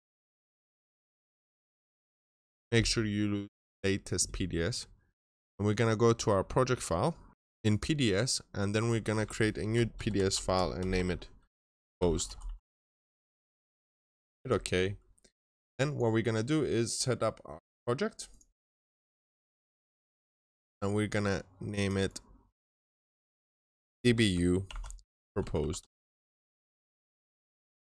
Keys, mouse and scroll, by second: 0.1 double click, 1.5 click, 6.2-7.3 scroll down 1, 7.3 double click, 7.4 click, 7.5 double click, 8.6 click, 9.6-12.3 typing, 11.6 middle click, 14.0 Return, 14.0 click, 22.6 shift+middle click, 23.9 Right, 24.1 shift+middle click, 24.5 middle click, 24.9-27.7 typing.